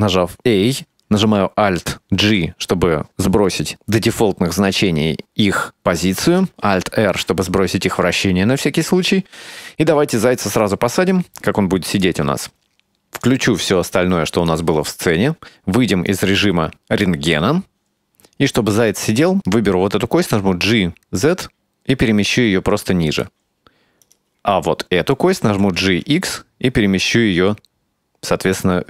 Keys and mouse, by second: 2.3 alt+g, 7.1 alt+r, 10.7-12.1 drag, 13.3-14.6 drag, 16.2 click, 17.5-18.0 middle drag, 18.2 right click, 19.8 g, 24.1 right click, 24.6-25.3 middle drag, 25.5 g.